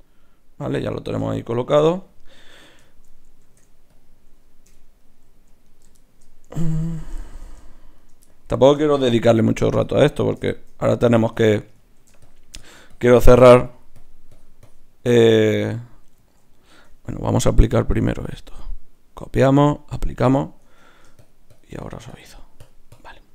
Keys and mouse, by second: 3.4 ctrl+Tab, 4.6 KP_Divide, 5.6-10.0 drag, 9.0 shift+q, 11.3 Tab, 12.2-16.7 drag, 16.1 ctrl+z, 16.7 Tab, 17.9-23.3 drag, 20.7 Tab.